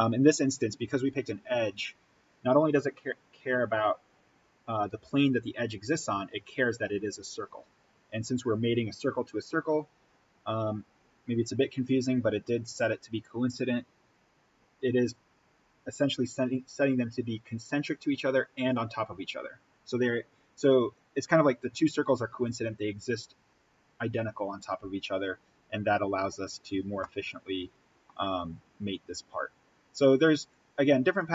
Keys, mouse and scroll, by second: 25.4-25.7 scroll up 1, 27.0-28.8 middle drag, 28.8-31.3 drag.